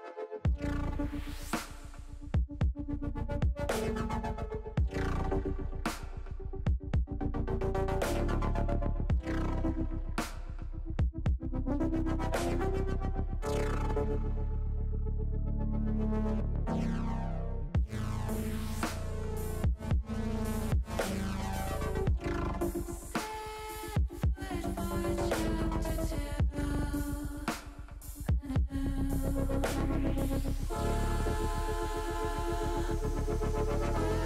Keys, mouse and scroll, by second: 0.2 middle click, 0.6 middle click, 3.1 middle click, 4.5 click, 7.9 alt+shift+click, 8.5 click, 10.2 click, 12.0 alt+shift+click, 12.8 click, 14.9 middle click, 16.0 s, 18.8 click, 19.6-20.8 drag, 23.9 s, 24.8 click, 25.4 middle click, 26.1 click, 29.1 click, 29.8 alt+shift+click, 31.2 s, 32.3 click, 32.7 ctrl+z, 33.0 click.